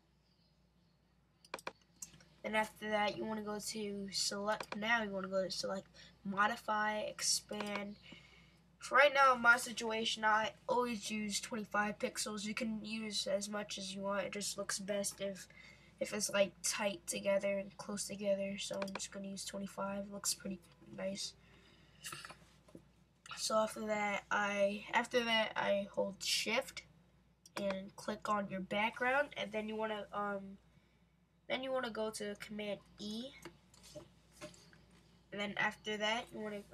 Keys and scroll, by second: 32.9 super+e.